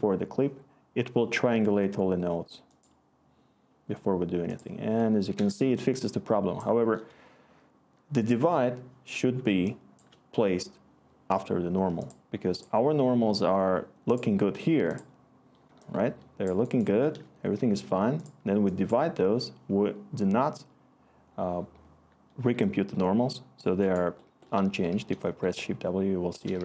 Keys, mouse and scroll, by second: 24.9 w, 26.5 w.